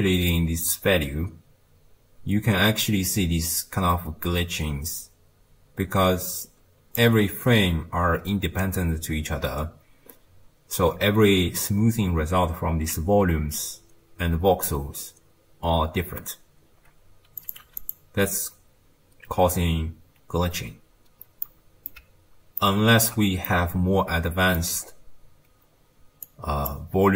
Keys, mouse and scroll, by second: 0.3-3.7 shift+drag, 17.4 click, 21.5-24.9 middle drag, 24.9-26.3 scroll up 2, 26.3 click.